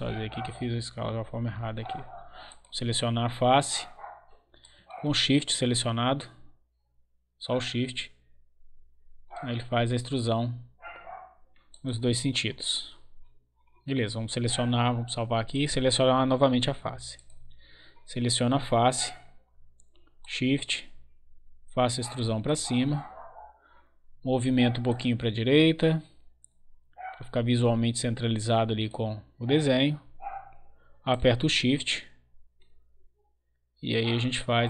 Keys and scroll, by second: 1.0 ctrl+z.